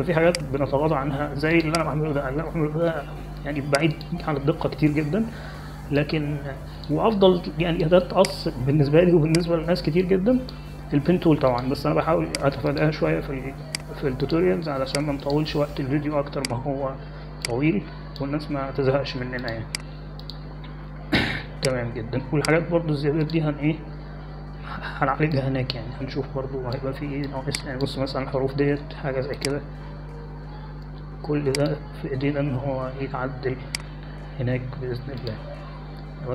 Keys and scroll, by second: 7.9 space, 27.3 space.